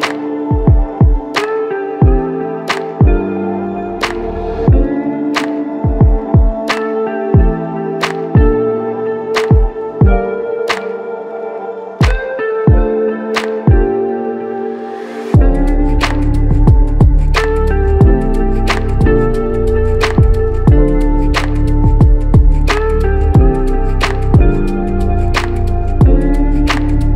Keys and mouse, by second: 2.7 double click, 15.2 alt+click, 18.0 alt+click, 18.3 alt+click, 18.4 alt+double click, 21.6 typing.